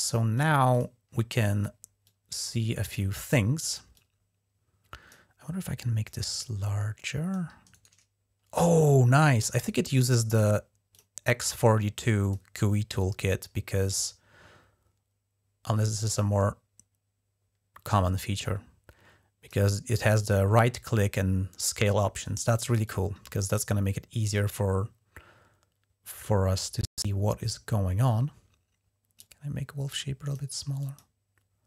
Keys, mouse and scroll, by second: 0.5 click, 1.8-3.1 drag, 3.7-4.9 drag, 5.8-7.1 drag, 7.5 right click, 10.7 click, 11.7 click, 13.1-19.3 drag, 22.6-26.4 drag, 29.0-30.2 drag, 30.6 click.